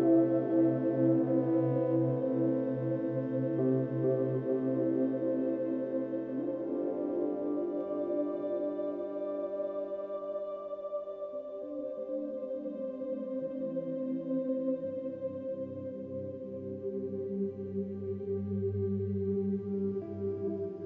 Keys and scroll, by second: 1.8 space, 10.1 b, 13.8 v, 15.5 space.